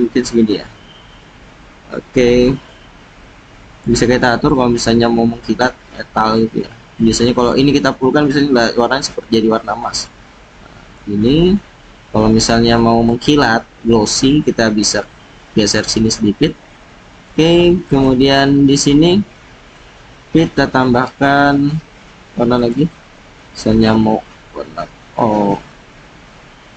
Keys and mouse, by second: 5.6-11.0 drag, 13.0-17.3 drag, 17.9 click, 20.3 click, 22.6 click.